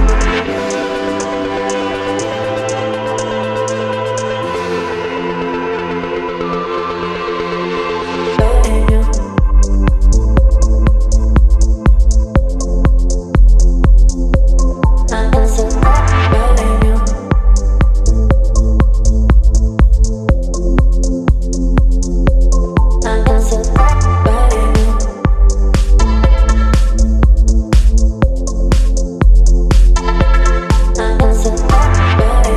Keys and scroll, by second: 1.3 space, 11.3 space, 13.3 ctrl+z, 22.7 space, 24.3 Down.